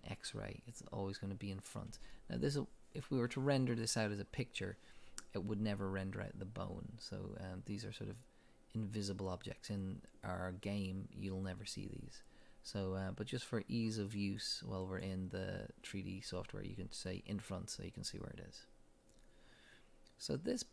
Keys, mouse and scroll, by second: 14.2 click, 14.8 click, 20.1-20.6 scroll up 1.